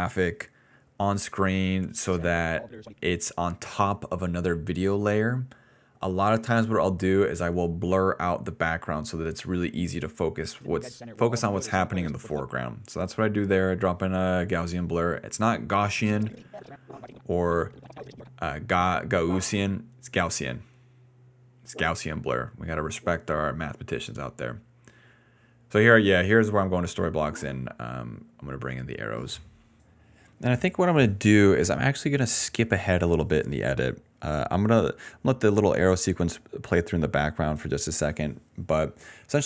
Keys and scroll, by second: 3.0 s, 4.2 a, 9.9-12.3 typing, 15.4 s, 15.6 s, 21.0-22.0 typing, 26.6 r.